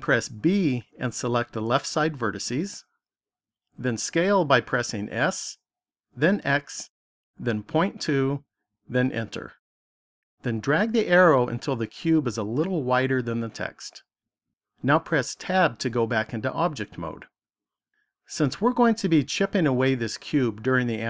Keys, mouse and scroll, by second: 0.3 b, 5.1 s, 11.5 click, 15.5 Tab.